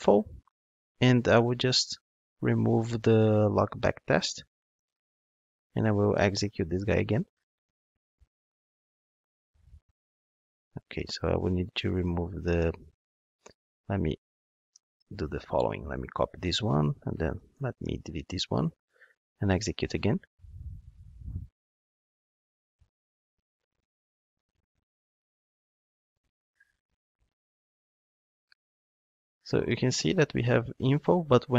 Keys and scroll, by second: 4.7 super+/, 13.8 super+a, 14.8 super+/, 15.5 super+c, 17.6 Delete.